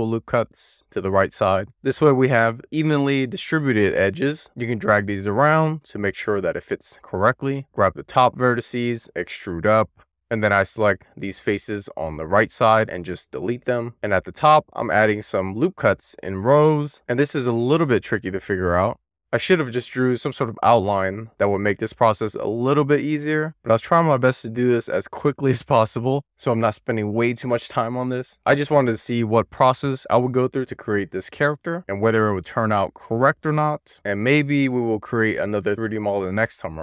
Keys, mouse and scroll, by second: 2.3 right click, 2.7 click, 4.1 click, 5.2 click, 5.5 click, 7.6 click, 8.1 d, 8.4 z, 11.0 click, 12.5 x, 14.7 ctrl+r, 21.0 right click, 22.0 click, 23.9-26.3 scroll up 1, 26.6-27.1 shift+scroll up 1, 27.7-28.3 scroll up 1, 28.5-29.6 shift+middle drag, 34.6-36.8 scroll up 1.